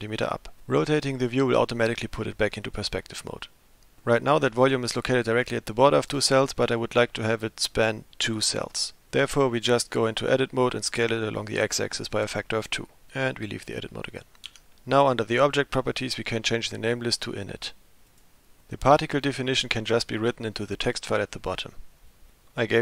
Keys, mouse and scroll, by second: 3.4-4.0 middle drag, 9.3 Tab, 10.1 s, 13.0 Tab, 14.5 Tab, 15.8-17.5 drag.